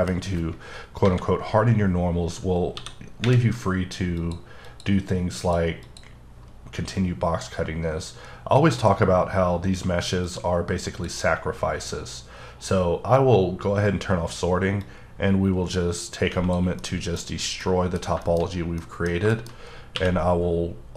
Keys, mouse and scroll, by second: 0.1 scroll down 1, 1.0 KP_7, 2.7 d, 4.2 click, 4.6 click, 5.4 click, 5.8 click, 10.2 click, 14.8 click, 16.8 middle click, 17.3 scroll up 2, 17.6 middle click, 18.3 double middle click, 18.4 scroll up 3, 18.8 middle click, 19.3 shift+middle click, 19.5-19.9 shift+scroll up 3, 19.9 q.